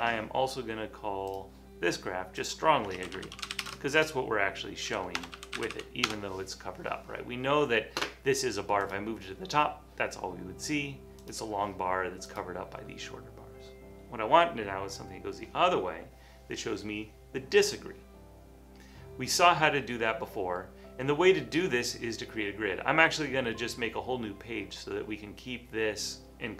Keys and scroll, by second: 2.3-7.7 typing.